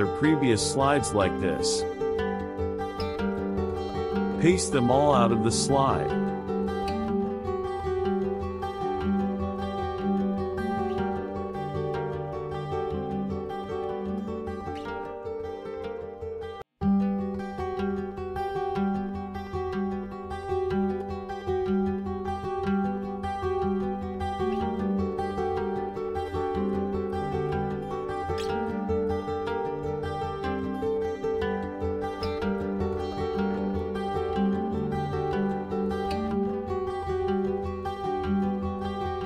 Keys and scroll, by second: 1.6 ctrl+z, 8.1 ctrl+c, 9.7 ctrl+v, 14.7 ctrl+c, 15.9 ctrl+v, 26.4 ctrl+c, 28.0 ctrl+v, 31.5 ctrl+c, 32.9 ctrl+v, 38.6 ctrl+c.